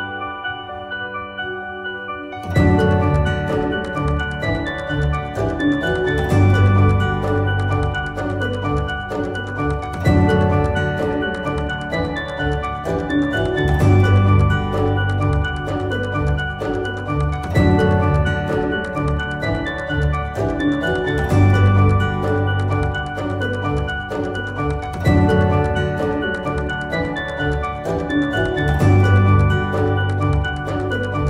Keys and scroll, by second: 14.2 Caps_Lock, 15.2-20.5 typing, 21.5-22.7 typing.